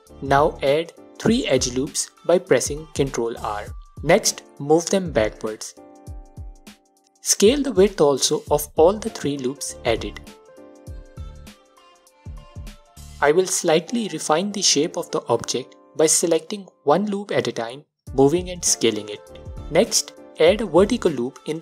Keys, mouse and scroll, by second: 0.5 2, 1.4 ctrl+r, 4.1 click, 4.9-11.1 drag, 11.8-13.4 alt+drag, 13.5 click, 14.5-16.0 drag, 16.1 click, 16.8-19.8 drag, 18.6 ctrl+r, 20.1-20.6 scroll down 1, 20.6 scroll down 1, 20.7-21.6 alt+drag.